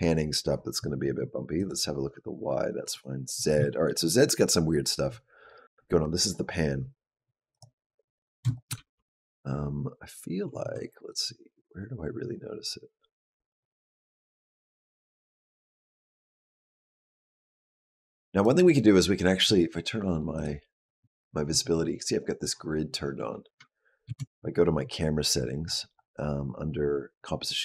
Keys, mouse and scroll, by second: 1.4 click, 2.6 click, 3.5 shift+middle click, 7.3 click, 8.4 shift+click, 8.6 g, 10.9 click, 20.2 click, 23.9 shift+b, 25.4-27.0 scroll down 6.